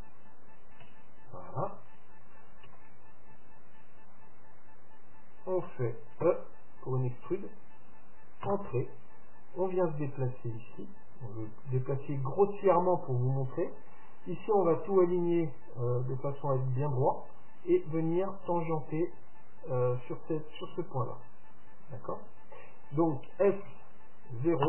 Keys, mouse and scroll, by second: 0.9 KP_Decimal, 2.8 KP_3, 6.4 e, 9.5-11.4 drag, 23.8 s.